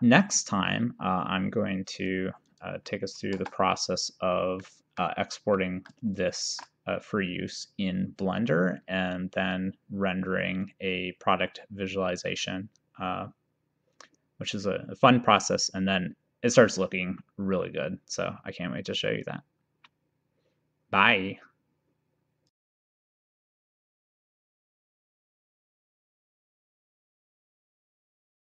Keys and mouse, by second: 2.6 click, 3.4 KP_0, 4.7 middle click, 6.6 ctrl+s.